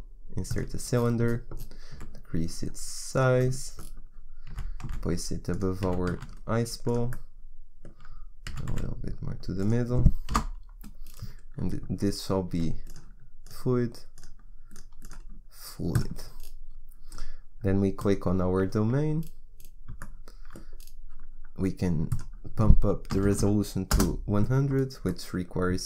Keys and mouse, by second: 1.8 s, 4.4 g, 5.8 g, 8.4 g, 10.2 KP_1, 11.0 middle click, 12.5 s, 13.4 click, 16.7-17.9 middle drag, 17.9-19.5 right drag, 22.0-23.3 drag, 23.3 KP_0.